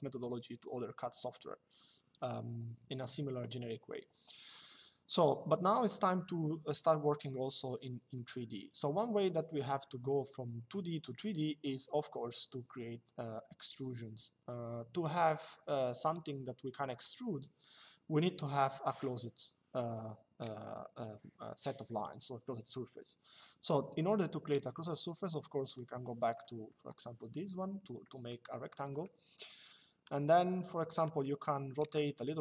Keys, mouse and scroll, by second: 24.8 click, 26.4 Escape, 27.7 middle click, 30.1 shift+middle click.